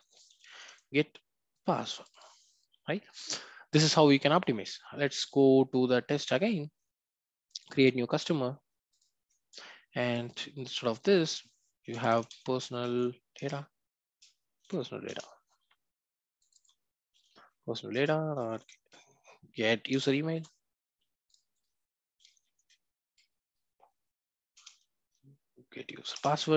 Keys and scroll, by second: 1.6 Return, 8.9 ctrl+b, 13.4 Return, 17.9 Return, 24.5 Return.